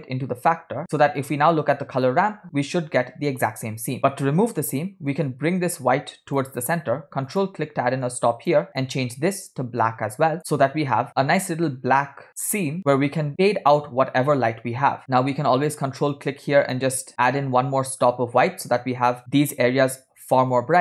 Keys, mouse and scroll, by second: 1.1 click, 2.3 ctrl+shift+click, 4.1 middle click, 4.1 scroll up 5, 5.3-6.4 drag, 7.5 ctrl+click, 8.2-8.6 drag, 8.7 click, 15.6 ctrl+click, 16.2-16.8 drag, 17.1 click, 20.5 click.